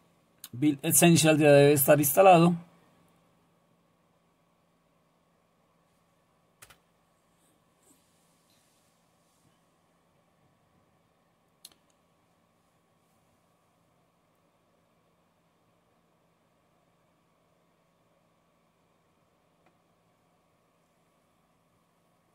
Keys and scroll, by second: 6.6 Return.